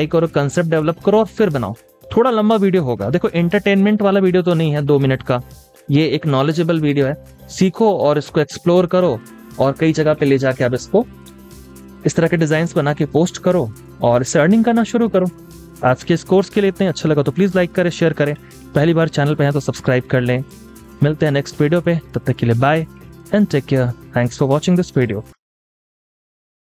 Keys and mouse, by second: 12.4 double click.